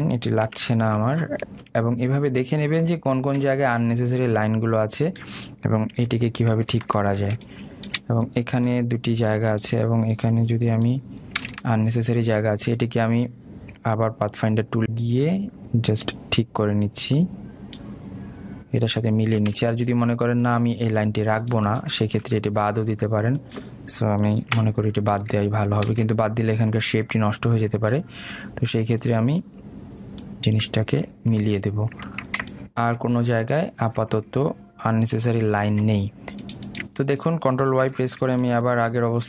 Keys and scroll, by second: 1.5 Delete, 7.0 Delete, 12.5 ctrl+z, 20.7 ctrl+z, 25.6 Delete, 27.0 ctrl+z, 39.0 ctrl+y.